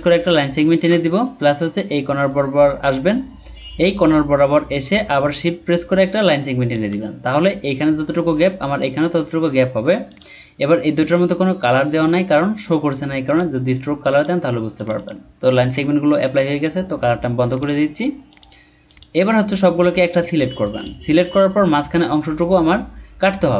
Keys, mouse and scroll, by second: 5.3 shift+click, 14.9 double click.